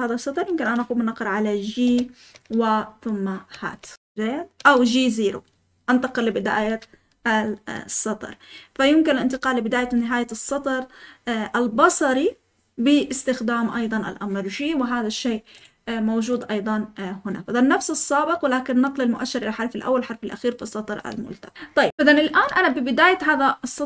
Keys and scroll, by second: 1.8 g, 15.9 typing.